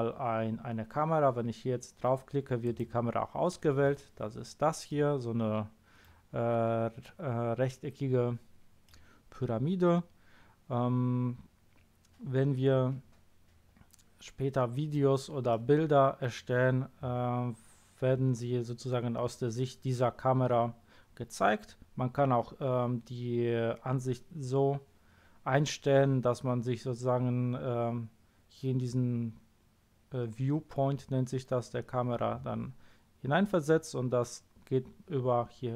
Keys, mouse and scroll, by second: 2.6 click, 4.9-5.6 middle drag, 8.8-9.7 middle drag, 15.5 middle click.